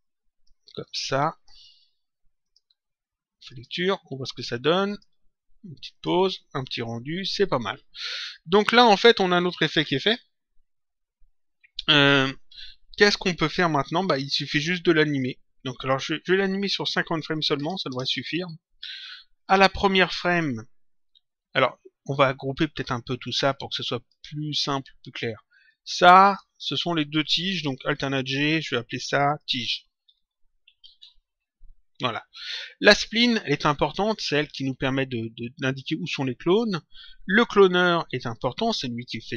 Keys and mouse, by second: 2.3 click, 3.5 click, 4.8 click, 16.6 click, 17.9 Return, 19.4 click, 23.3 click, 25.6 click, 28.2 alt+g, 29.1 click, 30.0 t, 30.3 |, 30.6 g, 30.7 €, 31.2 Return, 32.7 click, 37.4 ctrl+click.